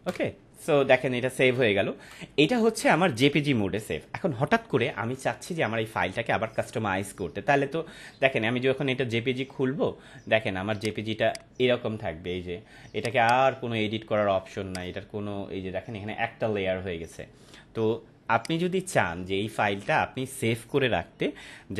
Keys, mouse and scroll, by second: 10.7 click, 18.3 click, 18.4 click.